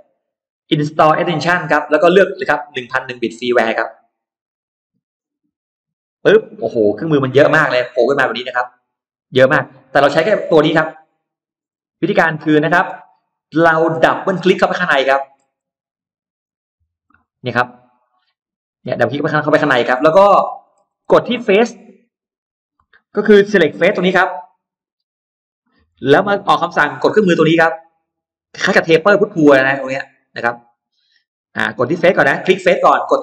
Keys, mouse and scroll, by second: 0.4 click, 3.2 click, 6.6 click, 7.6 click, 9.2 click, 10.7 click, 11.6 middle click, 12.0-13.0 scroll down 2, 12.4 middle click, 13.5 middle click, 13.7-14.0 scroll down 1, 14.0-14.4 scroll up 1, 14.5 scroll down 1, 14.9 middle click, 15.2 scroll down 1, 16.3 click, 17.0 middle click, 17.3-17.6 scroll down 1, 18.0 scroll up 1, 18.2 middle click, 18.6 scroll down 1, 19.3 scroll up 1, 19.4 middle click, 19.9-20.2 scroll down 1, 20.4-21.4 scroll up 2, 21.4 middle click, 22.4 click, 23.4 shift+x, 24.1-25.4 drag, 25.7-30.7 drag, 30.9 right click, 32.2 click.